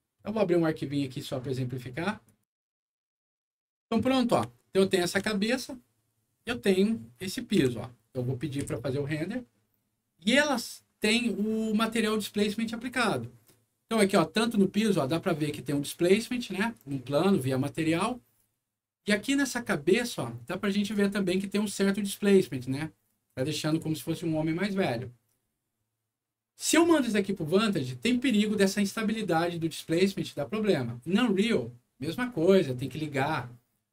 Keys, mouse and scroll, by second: 2.2 click, 3.6 middle click, 4.2 scroll up 2, 4.5 alt+middle click, 6.2 alt+middle click, 6.7 alt+middle click, 7.2 alt+middle click, 7.5 g, 7.8 middle click, 8.5 F9, 13.9 scroll up 1, 14.7 middle click, 17.3 scroll down 1, 18.4 scroll up 1, 20.0 click, 21.3 scroll down 1, 23.3 click.